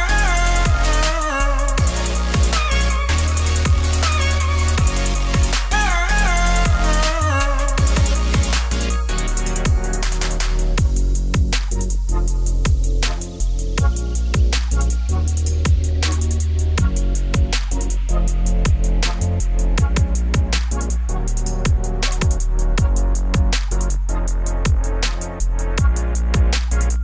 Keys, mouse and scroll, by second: 5.2-6.3 scroll down 1, 6.7-7.3 scroll down 1, 7.3 click, 9.9 ctrl+s, 10.1 click, 10.5-11.7 drag, 11.7 ctrl+s, 12.0 click, 12.9-14.1 drag, 14.2-15.4 drag, 16.1 ctrl+s, 17.1 scroll down 1, 17.5 shift+a, 20.4-22.5 drag, 24.7 click, 26.3 click.